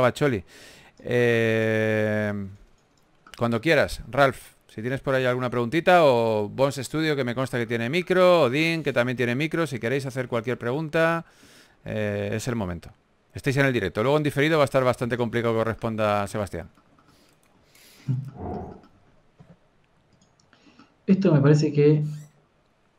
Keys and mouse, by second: 0.7 click, 1.3 f, 2.3 f, 4.2 middle click, 6.0 f, 7.0 f, 10.7-11.9 drag, 11.9 ctrl+z, 12.1 ctrl+z, 15.2 click, 15.3 a, 16.0 ctrl+s, 20.3 KP_3.